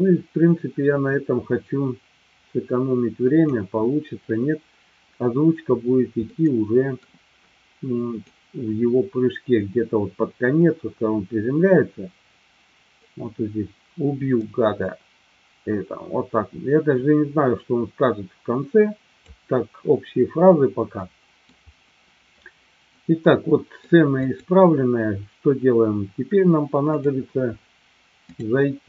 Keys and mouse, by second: 6.2-7.0 middle drag, 9.0-20.4 drag, 21.0-21.5 middle drag, 23.2 middle click, 24.1 click, 27.0 click, 28.4-28.8 drag.